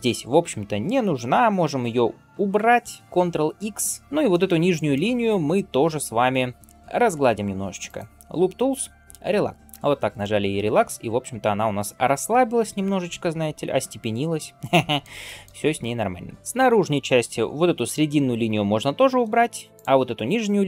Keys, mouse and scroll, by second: 3.4 ctrl+x, 4.0 alt+click, 4.2 middle click, 7.7-9.5 right drag, 9.7 scroll down 1, 10.1-15.0 middle drag, 15.1 shift+middle click, 15.5-16.2 scroll up 2, 16.2 middle click, 18.8 ctrl+x, 19.6 alt+click.